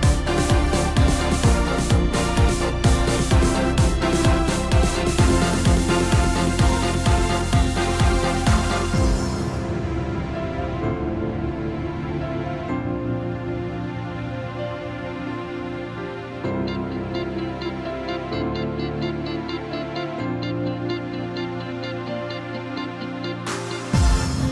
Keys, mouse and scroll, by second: 0.9-1.8 middle drag, 1.8-3.4 scroll up 10, 3.4-5.0 middle drag, 5.0 scroll down 1, 6.7 KP_3, 7.6-8.4 scroll down 4, 8.4-9.4 middle drag, 9.4 scroll up 2, 10.2 KP_1, 11.5 ctrl+KP_4, 11.6-13.2 ctrl+KP_4, 14.2-15.3 ctrl+KP_2, 16.4 scroll up 1, 18.4 click, 20.4 Tab, 22.7 click.